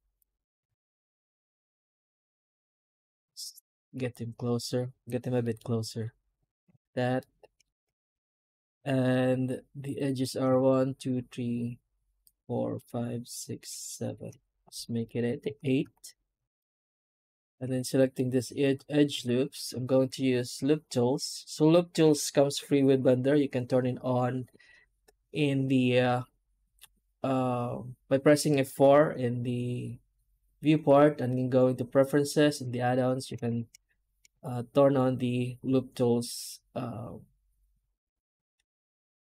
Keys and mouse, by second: 0.7 shift+z, 3.4 alt+a, 7.0 middle click, 8.3 middle click, 8.6 alt+a, 9.7 right click, 15.3 alt+a, 16.5 alt+shift+right click, 18.0 middle click.